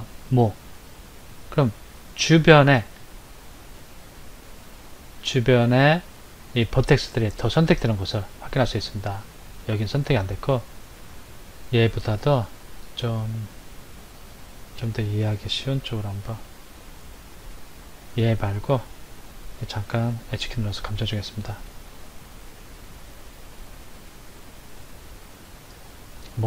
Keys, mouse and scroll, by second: 7.2 middle click, 10.1 middle click, 16.2 Tab, 18.1 click, 20.4 h, 21.8 shift+a.